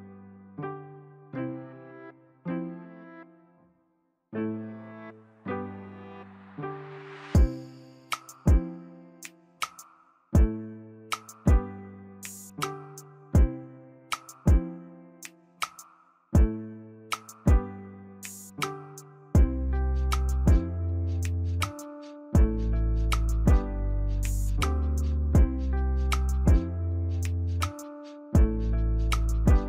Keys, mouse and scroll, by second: 3.3 ctrl+j, 7.5 ctrl+click, 8.6 ctrl+click, 8.9 ctrl+z, 11.8 ctrl+z, 19.3 ctrl+t, 22.6 double click, 26.7 ctrl+t, 27.6 alt+click.